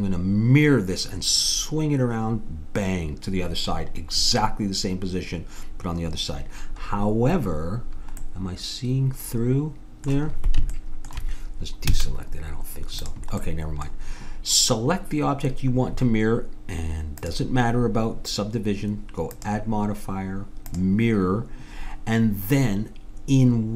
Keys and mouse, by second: 8.3 middle click, 11.9 a, 13.0-14.7 drag, 17.2-19.1 drag, 19.3-21.1 drag.